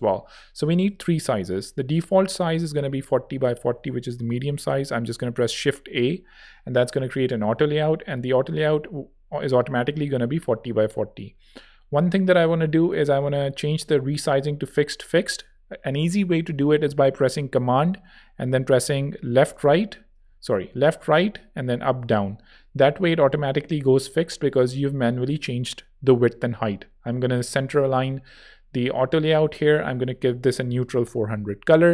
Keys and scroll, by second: 4.8 shift+a, 14.5 Escape, 19.2 super+Right, 19.4 super+Left, 20.2 super+Home, 20.6 super+Right, 20.9 super+Left, 21.6 super+Down, 21.9 super+Up, 29.8-30.9 typing, 30.9 Return.